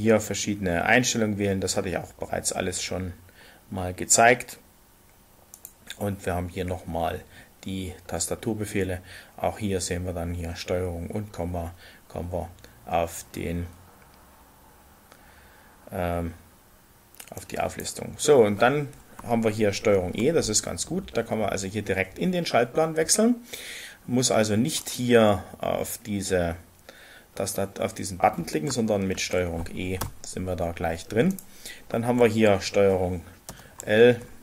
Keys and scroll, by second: 19.9 ctrl+e, 29.1 ctrl+e, 33.4 ctrl+l.